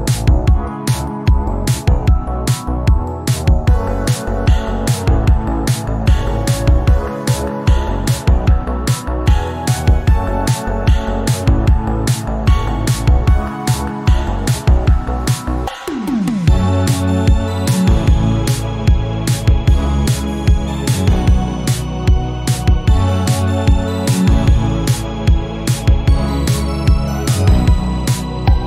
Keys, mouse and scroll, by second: 3.7 shift+middle click, 3.9 click, 4.7 middle click, 5.2 click, 5.7 g, 6.5-8.7 drag, 8.7-9.3 scroll up 3, 9.0 click, 9.7 click, 10.6 scroll down 1, 10.9 click, 11.1 scroll down 3, 11.3-14.6 middle drag, 14.6 n, 15.2 KP_1, 15.5 scroll down 2, 15.8-16.9 shift+middle drag, 16.9 KP_1, 17.0 scroll down 2, 17.2 middle click, 17.4 scroll up 1, 17.6 shift+a, 19.2 click, 19.9 middle click, 20.5 KP_7, 20.9 shift+middle click, 21.3 scroll up 1, 21.6 Tab, 22.1-23.1 typing, 23.9 Tab, 24.4 scroll up 1, 24.7 shift+middle click, 25.1-25.9 scroll up 1, 26.7-28.6 drag.